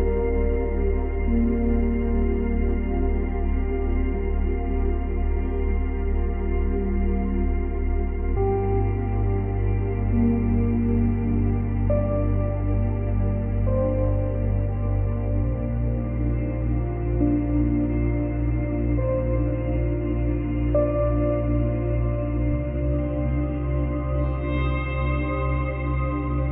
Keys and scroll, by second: 2.3 space, 3.4 space, 14.7 space, 16.1 space, 21.1 space, 22.4 space.